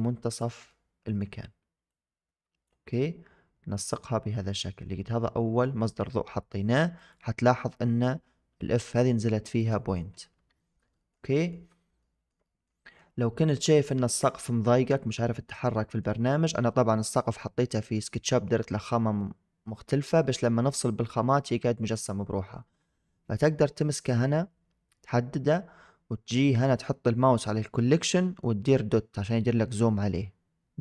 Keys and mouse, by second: 0.7-1.1 middle drag, 2.0 click, 2.8-4.5 middle drag, 5.3-5.6 middle drag, 6.8 click, 10.5 shift+drag, 11.0 middle click, 11.3 shift+click, 12.0 shift+drag, 12.5 middle click, 12.8 shift+click, 13.2 click, 13.9-14.5 middle drag, 15.4-15.9 middle drag.